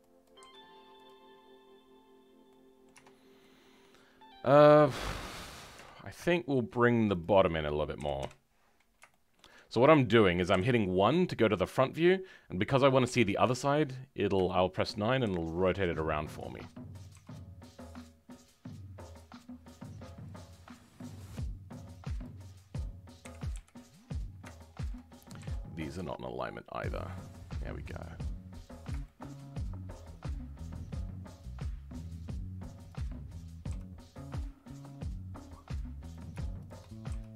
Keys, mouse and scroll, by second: 0.4 g, 2.2 scroll down 2, 2.4 middle click, 2.9 Tab, 3.1 scroll down 2, 3.4-5.7 middle drag, 5.7 Tab, 5.8 scroll up 3, 6.2 shift+middle click, 7.2 click, 7.9 KP_1, 8.6 scroll up 2, 9.1-10.5 shift+middle drag, 10.5 KP_1, 10.8 scroll down 3, 13.0 KP_9, 13.6 scroll up 2, 14.4 shift+middle click, 15.2 g, 20.2 click, 20.9-22.2 middle drag, 22.2 click, 23.2 KP_1, 24.5 shift+middle click, 25.4 g, 29.0 shift+middle click, 29.7-30.3 scroll down 1, 30.3-31.0 scroll up 1, 32.8 click, 36.6 shift+click, 37.1 g.